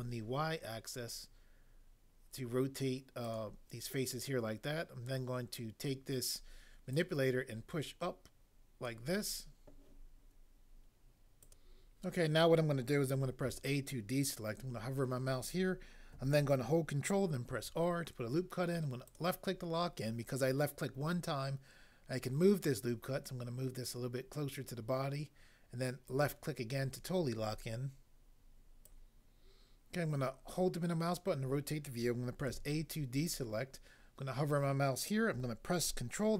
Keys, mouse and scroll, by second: 11.4 click, 13.4 a, 17.5 ctrl+r, 19.1 click, 26.2 click, 28.8 click, 32.5 a.